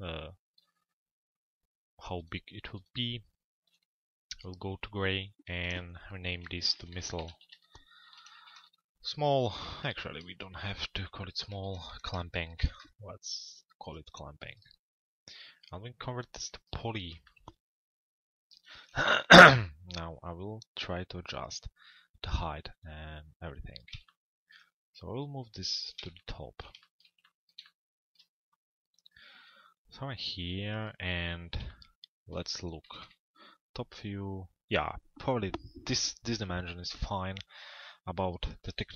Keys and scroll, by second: 9.3 BackSpace, 12.8 Return, 32.4 t, 33.0 z.